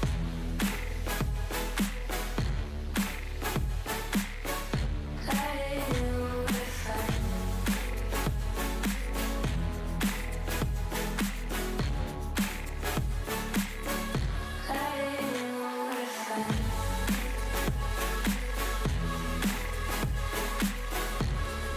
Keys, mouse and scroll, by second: 0.4 click, 0.7 middle click, 0.9-1.3 scroll up 1, 1.3 click, 1.9 shift+click, 3.2 x, 4.0 2, 4.4 alt+click, 5.0 alt+shift+click, 5.5 KP_3, 5.8 shift+middle click, 6.0-6.3 scroll up 4, 6.3 e, 9.1-9.7 scroll down 5, 9.7 middle click, 10.3 alt+z, 10.6 alt+z, 11.0 a, 11.3 m, 12.2 click, 13.0 middle click, 13.2 scroll down 5, 13.5 middle click, 13.8 Tab, 14.5 click, 15.1 click, 16.0 click, 16.3 click, 16.7 click, 17.6-18.2 shift+middle drag, 18.2-18.5 scroll down 1, 18.5 click, 19.8-20.5 middle drag, 20.5 click, 20.8 click, 20.9-21.5 middle drag, 21.5 scroll up 5.